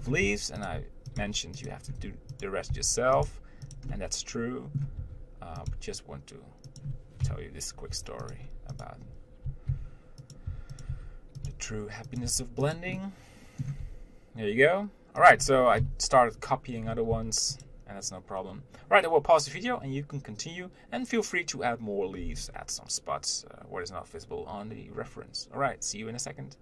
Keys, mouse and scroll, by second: 0.3 scroll up 1, 0.5 r, 1.4 g, 2.1 scroll up 1, 2.2 r, 3.5 g, 4.2-5.3 middle drag, 5.3 r, 5.9 g, 8.2 r, 9.1 click, 10.0 shift+d, 10.7 r, 11.7 g, 12.5 r, 13.2 middle click, 14.1 g, 17.0-17.4 scroll down 1, 17.4 s.